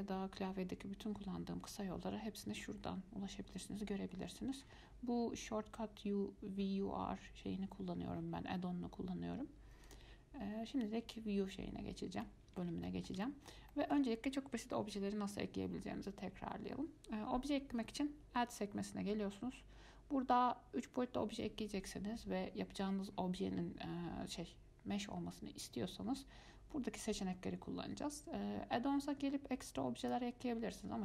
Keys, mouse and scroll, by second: 10.1 click, 12.5-17.0 middle drag, 18.7-21.8 drag, 30.2-31.0 drag.